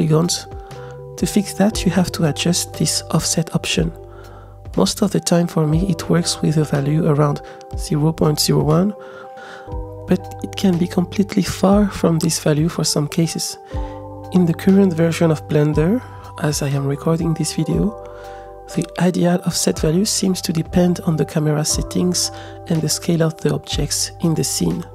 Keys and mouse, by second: 0.7 click, 1.8 middle click, 2.3 s, 2.8 ctrl+click, 4.6-9.1 drag, 6.5 BackSpace, 9.7 click, 10.6-12.0 middle drag, 12.7 click, 13.8-15.2 middle drag, 16.1-17.4 middle drag, 17.6 KP_0, 18.0 click, 18.9 middle click, 20.3 middle click, 21.7-22.8 drag, 23.2 s.